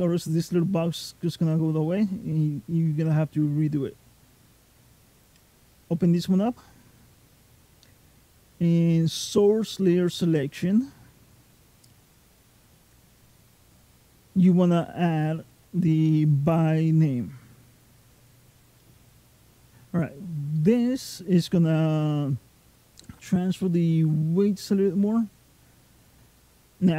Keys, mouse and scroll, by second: 5.2 click, 11.8 click.